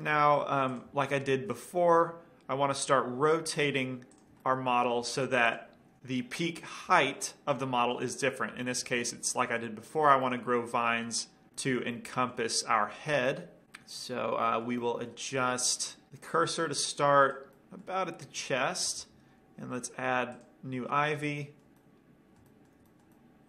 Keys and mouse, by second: 2.8 r, 4.5-5.7 drag, 4.7-5.6 middle drag, 5.3 g, 6.0-10.0 middle drag, 12.0-13.7 middle drag, 14.0-16.0 middle drag, 16.0 right click, 16.5-16.8 drag, 16.8-17.5 middle drag, 17.5 click, 17.5 right click, 19.2 shift+a.